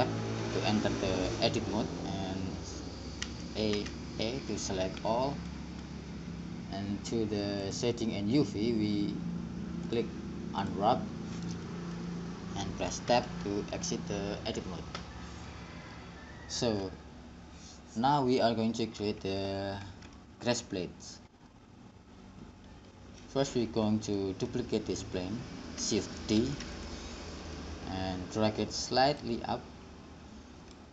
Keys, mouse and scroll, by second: 0.7 click, 3.5 a, 4.0 a, 4.7-11.5 drag, 13.3 Tab, 16.1-19.5 middle drag, 22.2-24.4 middle drag, 26.6 shift+d.